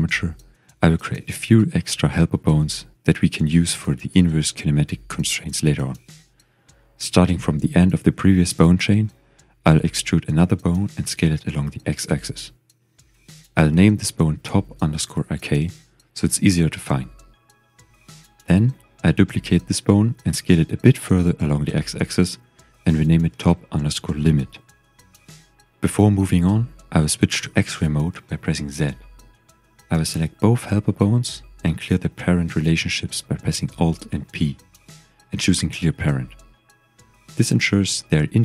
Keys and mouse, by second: 0.5 click, 0.8 g, 2.6 click, 3.3 shift+click, 9.1 e, 10.5 x, 12.2 click, 14.1 click, 14.6 click, 15.0 click, 17.4-18.5 middle drag, 18.6 middle click, 19.6 shift+d, 20.9 click, 21.4 s, 21.6 x, 22.8 click, 23.4-26.3 drag, 27.6 shift+middle click, 27.7 shift+click, 28.3 z, 29.9 shift+click, 30.9 click, 32.9 alt+p, 36.3 g, 37.1 click, 37.6 click, 38.0 g.